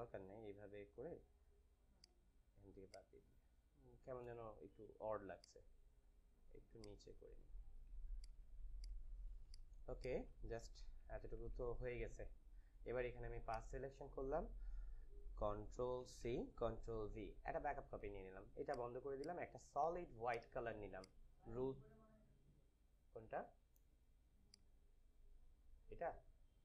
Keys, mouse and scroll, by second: 1.8 click, 4.8 a, 5.3 click, 5.4-8.1 drag, 7.9 space, 8.2 click, 8.4 space, 9.4 click, 9.6 space, 9.8 click, 10.1 space, 10.8 ctrl+-, 13.4 ctrl+click, 16.1 c, 17.0 ctrl+c, 17.2 ctrl+v, 18.6 click, 24.4 click.